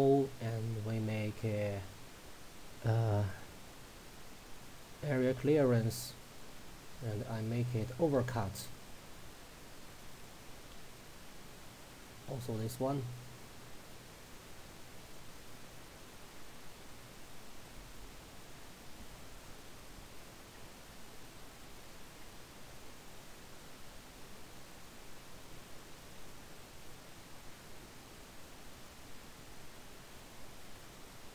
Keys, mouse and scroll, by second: 1.4 click, 5.9-6.5 drag, 15.1 click, 16.4 scroll down 1, 17.3-17.9 drag, 20.6-21.6 scroll down 1, 21.6 click, 22.3-22.6 scroll down 1, 24.2 scroll up 1, 26.7-27.6 drag, 30.1 scroll down 1.